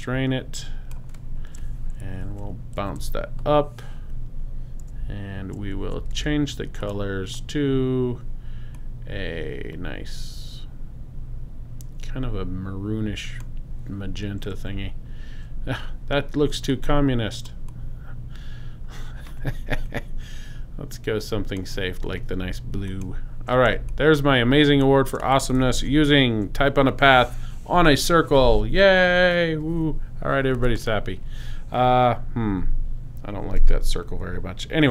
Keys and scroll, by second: 2.3 shift+Up, 6.1 shift+x, 23.7 super+space, 24.5 space, 25.8 super+0.